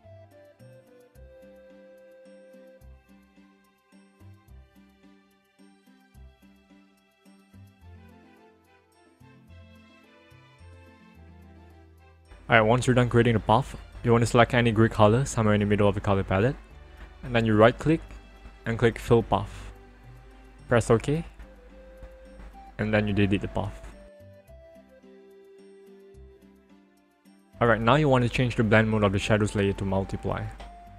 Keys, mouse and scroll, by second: 1.0 click, 2.2 ctrl+click, 3.5 click, 4.2 click, 6.6 alt+click, 8.1 click, 10.8 ctrl+click, 13.6 click, 17.3 right click, 18.6 click, 21.0 click, 25.3 right click, 26.3 click, 27.9 click, 29.2 click.